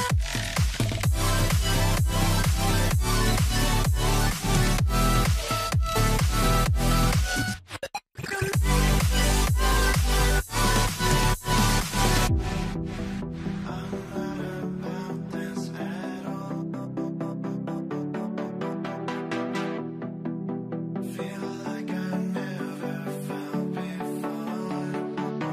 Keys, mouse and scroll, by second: 1.9 alt+middle click, 3.1 scroll up 1, 3.7 scroll down 1, 4.4 right click, 6.2 right click, 7.3 shift+l, 11.2 right click, 19.1 right click, 24.5 right click.